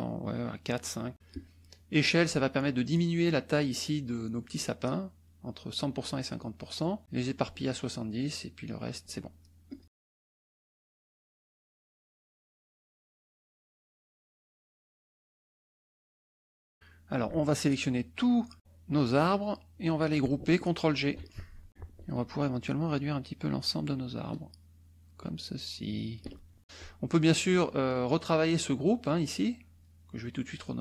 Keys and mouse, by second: 0.8 click, 9.7 click, 10.4 shift+click, 11.8 shift+click, 12.4 shift+click, 12.6 shift+click, 13.8 shift+click, 14.8 ctrl+shift+z, 15.4 shift+click, 15.9 shift+click, 17.1-19.4 drag, 21.0 ctrl+g, 22.6-26.5 ctrl+drag, 28.9 click, 29.6 click, 30.4 click.